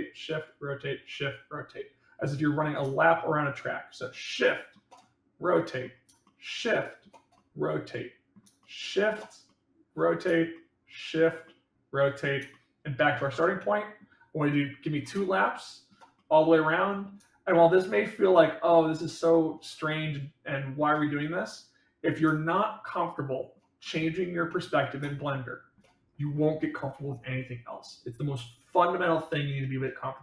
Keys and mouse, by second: 4.0-4.6 shift+middle drag, 4.9-5.7 middle drag, 6.1-6.9 shift+middle drag, 7.3-8.2 middle drag, 8.5 shift+middle click, 9.4-10.1 middle drag, 10.5 shift+middle click, 11.4-12.1 middle drag, 12.5-13.0 shift+middle drag, 13.2-13.9 middle drag, 15.4-15.8 shift+middle drag, 16.1-16.9 middle drag, 17.4 shift+middle click, 18.3-19.4 middle drag, 19.8-20.7 shift+middle drag, 21.1 middle click, 22.5-23.5 shift+middle drag, 23.8 middle click, 25.0-25.7 shift+middle drag.